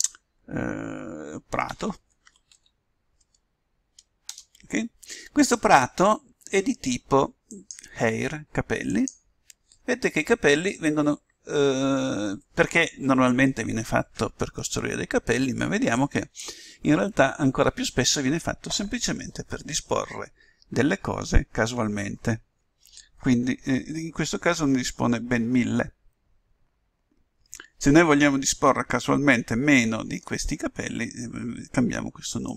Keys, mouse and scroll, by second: 7.4-9.3 drag, 10.1-16.4 middle drag, 10.1-11.2 scroll down 1, 11.2-12.7 scroll down 1, 12.7-14.5 scroll down 1, 32.4-32.5 drag.